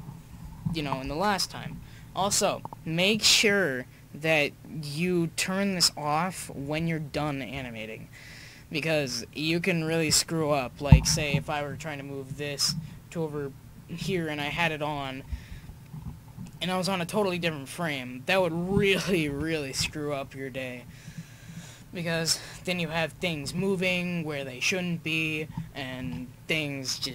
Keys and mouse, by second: 10.5-11.7 middle drag, 11.7 right click, 12.1 click, 12.2 click, 15.5 ctrl+z, 17.1-17.5 drag, 19.3 Right, 22.3 click, 22.9 middle click, 23.6 middle click, 23.8-26.0 middle drag, 26.0 KP_1.